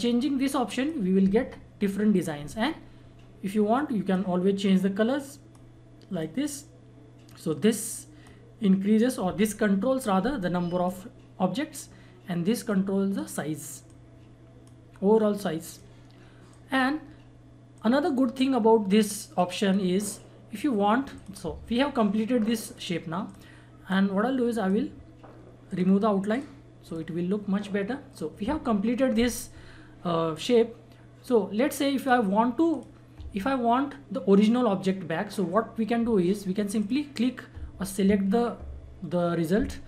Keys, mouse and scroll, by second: 4.0-25.6 drag, 30.3 click, 36.7 click.